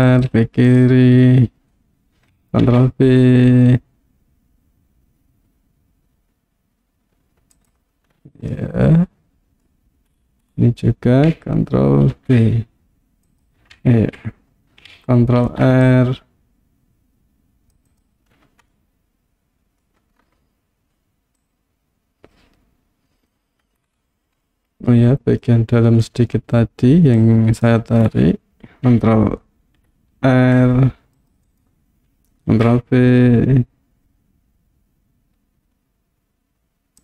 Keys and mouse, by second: 0.7 click, 2.7 ctrl+b, 7.6 click, 8.5-9.7 middle drag, 12.2 ctrl+b, 13.3 click, 14.1 ctrl+z, 15.4 ctrl+r, 17.9 click, 18.9 middle click, 21.5-23.3 drag, 24.6 middle click, 27.2 click, 29.8 ctrl+t, 30.2 ctrl+r, 31.5 right click, 32.6 ctrl+b.